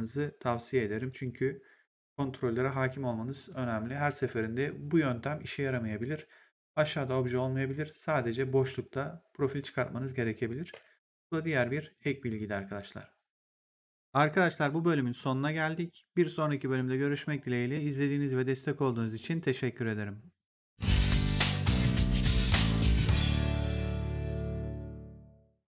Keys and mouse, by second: 1.0 right click, 3.3 click, 10.6 Delete, 13.6 click.